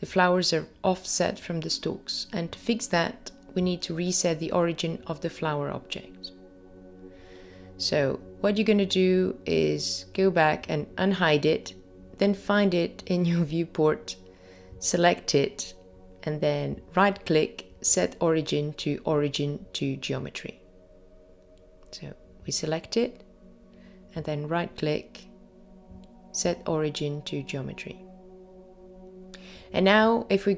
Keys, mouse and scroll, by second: 10.6 click, 12.0 click, 15.8 scroll down 1, 17.0-17.9 scroll down 2, 18.4-20.3 scroll down 1, 20.3-20.8 scroll up 2, 23.0 click, 25.3 right click.